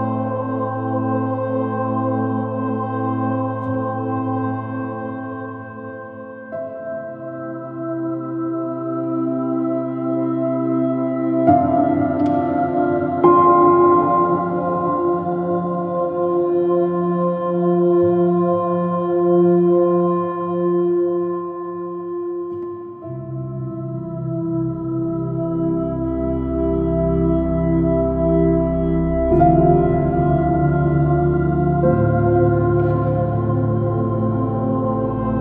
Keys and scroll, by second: 2.9 space, 4.1 space, 8.0 space, 10.1 b, 12.3 j, 16.0 space, 25.7 space, 27.1 space.